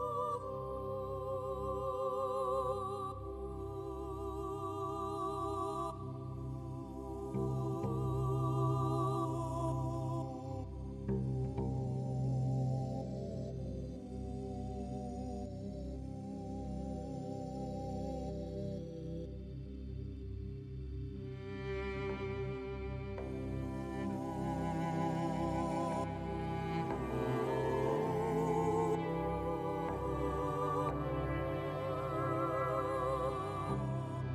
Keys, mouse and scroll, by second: 0.7 click, 2.9 click, 4.1 middle click, 4.7 click, 5.3 right click, 5.5 middle click.